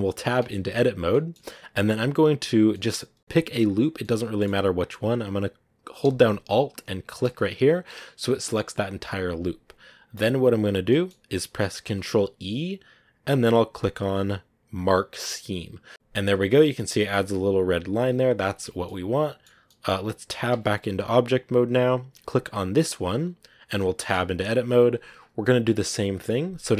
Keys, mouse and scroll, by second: 0.3 Tab, 0.9 scroll up 1, 1.0-4.1 middle drag, 4.1 scroll down 1, 4.3-7.1 middle drag, 7.1 alt+right click, 7.5-8.0 scroll up 1, 9.0-15.9 middle drag, 18.5 scroll down 3, 18.7-20.4 middle drag, 20.4 Tab, 23.1 right click, 23.7 middle click, 24.0 Tab.